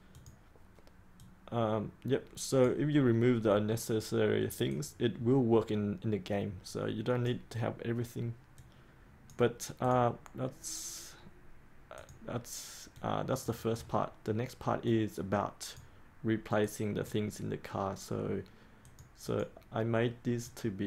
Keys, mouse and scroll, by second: 11.0-13.8 drag, 13.8-14.8 scroll down 1, 14.8-20.8 drag.